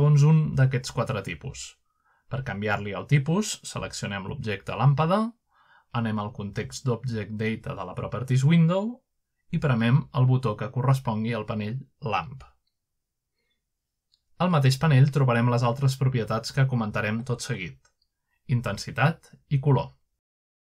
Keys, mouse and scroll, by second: 1.5 middle click, 1.8 typing, 5.1-6.0 scroll down 1, 6.1 click, 6.7-7.8 middle drag, 10.6 click, 11.6 click, 12.7 click, 13.6 click, 14.4 click, 15.1 click, 16.3 click, 16.9 click, 17.5 click, 18.0 click.